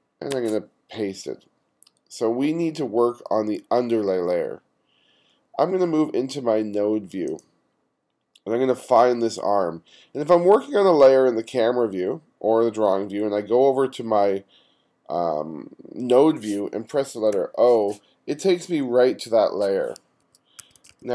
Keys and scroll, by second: 0.3 super+v, 17.4 o, 17.9 o, 20.3 1, 20.6 2.